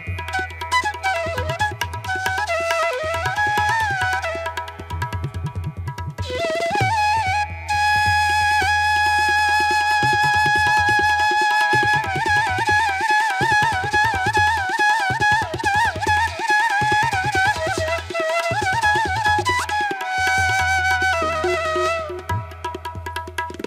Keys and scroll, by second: 0.1 space, 0.5 ctrl+-, 0.7 ], 1.3 ], 1.6 space, 2.0 ctrl+-, 3.5 space, 5.4 space, 6.8 ctrl+=, 9.4 space, 9.7 ctrl+=, 10.0 space, 10.3 ctrl+-, 11.3 ctrl+-, 11.8 ctrl+-, 12.1 space, 15.7 space, 21.2 space.